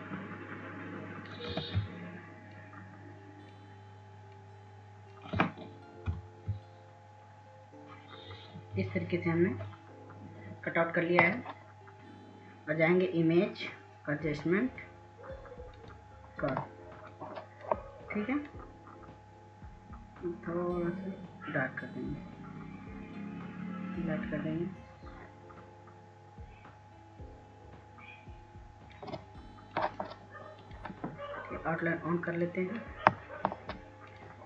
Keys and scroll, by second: 2.2 ctrl+z, 6.4 ctrl+z, 11.0 ctrl+0, 11.9 ctrl+alt+z.